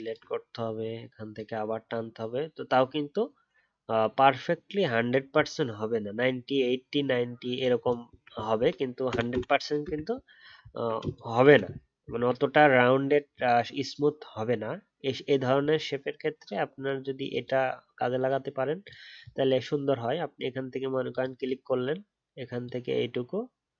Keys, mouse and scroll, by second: 0.0 alt+click, 7.5 alt+click, 7.8 alt+scroll down 1, 10.6-11.2 alt+scroll up 1.